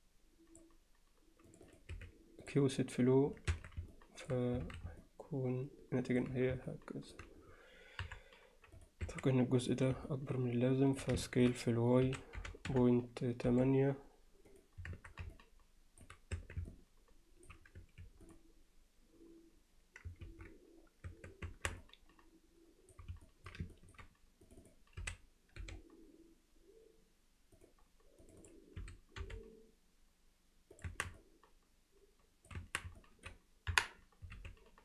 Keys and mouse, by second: 1.7 click, 3.5 Tab, 3.9-4.3 middle drag, 4.6 alt+a, 5.0-6.2 alt+middle drag, 6.7-7.1 middle drag, 8.0 KP_1, 8.8 click, 9.1 Tab, 9.6 click, 10.1 alt+middle click, 11.3 middle click, 12.1 s, 14.9 Tab, 15.3 alt+middle click, 16.4 Tab, 16.7 middle click, 17.8 q, 20.3 ctrl+z, 21.1 Tab, 21.5 Tab, 21.8-22.9 alt+middle drag, 23.3 alt+middle click, 23.7 ctrl+alt+middle click, 24.5 click, 25.0 s, 28.3 click, 28.8 s, 30.9 Tab, 31.2-32.5 alt+middle drag, 32.6 Tab, 33.0 alt+middle click, 33.7 KP_1, 34.4 z.